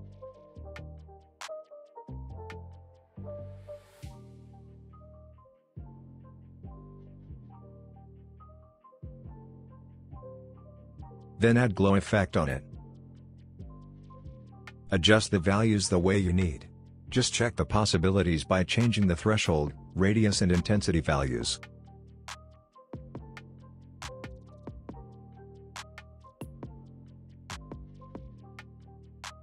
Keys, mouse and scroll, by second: 1.5 space, 3.4-6.2 drag, 6.1 scroll up 1, 6.7-7.8 scroll down 1, 7.8 click, 10.9-12.3 typing, 13.7 click, 14.9-18.0 scroll down 1, 19.6-20.5 drag, 20.9 ctrl+z, 21.6-22.8 drag, 27.7-28.7 scroll up 1, 29.2-29.4 drag.